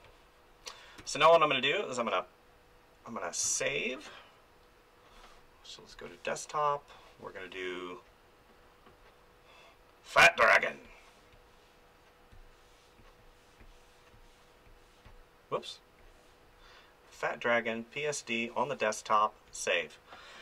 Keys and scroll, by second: 1.0 f, 3.4 ctrl+s, 10.1-15.0 typing, 16.2 k, 16.3 m, 16.3 n.